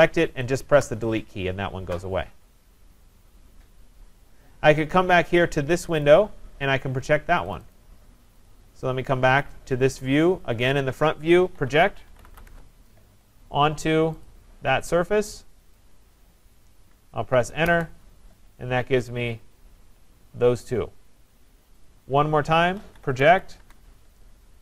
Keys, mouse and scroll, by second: 0.7 Delete, 1.6-4.0 scroll down 4, 4.0 scroll up 4, 4.7-5.7 scroll up 3, 6.0 click, 6.9 scroll, 7.5 click, 7.7 click, 8.5 click, 9.5 click, 11.6-12.7 typing, 14.3 click, 15.7 click, 17.6 Return, 19.2-19.9 scroll, 19.9-20.8 scroll, 21.9 click, 22.5-23.7 typing.